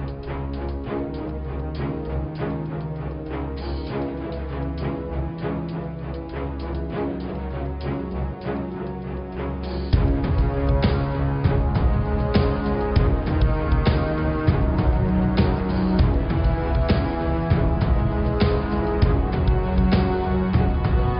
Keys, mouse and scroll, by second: 1.0 click, 1.5-2.6 scroll down 10, 3.6 click, 4.2-4.5 scroll up 5, 4.6 click, 6.3 shift+a, 11.2 r, 15.3 Tab, 15.7 Tab, 15.9 Tab, 16.1 click, 16.5 Tab, 16.9 Tab, 17.5 click, 18.1 click, 18.8 x, 20.7 x.